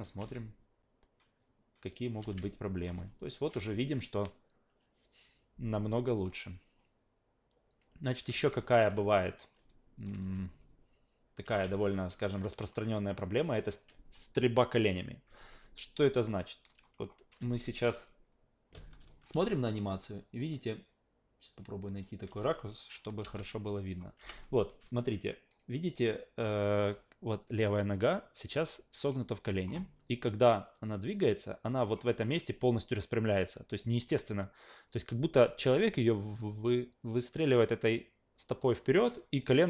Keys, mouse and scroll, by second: 0.2 alt+v, 2.2 alt+v, 2.8 click, 3.1-3.4 alt+drag, 3.5 alt+v, 8.3 alt+v, 9.3 click, 10.1 alt+v, 11.4 alt+v, 11.6 alt+middle click, 11.9 alt+right click, 12.7 click, 13.6 alt+right drag, 16.1-16.8 alt+drag, 17.9 click, 19.1 alt+click, 19.3 alt+v, 21.6-22.0 alt+drag, 22.2 alt+v, 22.8 click, 23.2 alt+v, 23.3-24.0 alt+drag, 24.2 alt+v, 24.9-26.8 drag, 30.5 click.